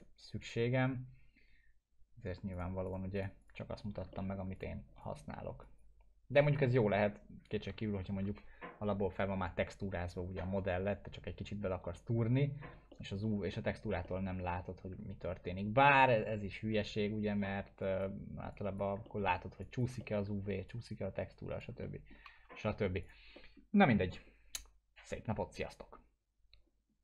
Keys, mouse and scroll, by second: 4.1 alt+middle click, 4.6-7.5 drag, 8.1 ctrl+z, 12.9 ctrl+z, 12.9 middle click, 12.9-13.5 alt+middle click, 14.1-15.0 alt+middle drag, 17.9 click, 19.1 alt+middle click, 19.6 click, 20.0 alt+middle click, 20.7-21.6 click, 21.8 alt+middle click, 22.6 ctrl+z, 23.0 click, 23.4 alt+middle click.